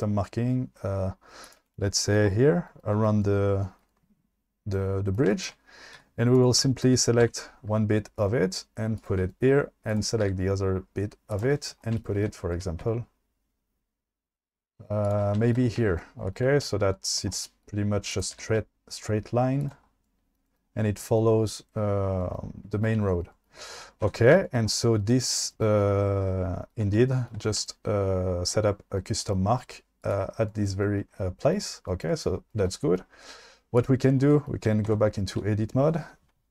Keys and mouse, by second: 6.0 1, 6.4 click, 7.2 g, 9.0 click, 10.0 click, 10.2 g, 11.3 click, 12.6 g, 15.0 shift+click, 18.2 click, 18.3 g, 19.6 shift+click, 24.1 Tab, 30.0 click, 34.9 Tab, 35.3 a.